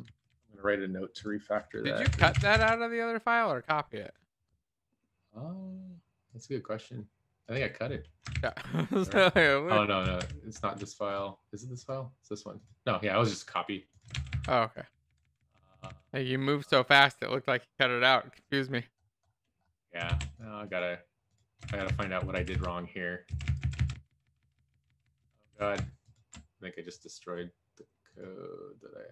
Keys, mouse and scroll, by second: 0.0 Up, 0.5 ctrl+s, 8.7 ctrl+z, 14.3 ctrl+z, 15.0 ctrl+shift+z, 20.1 ctrl+s, 22.4 ctrl+shift+z, 25.4 ctrl+s.